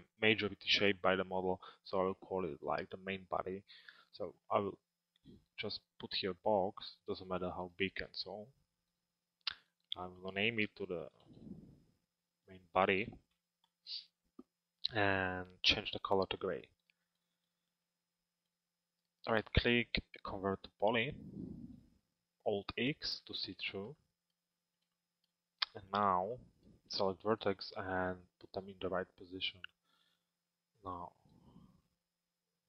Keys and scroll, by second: 13.2 Return, 22.7 alt+x.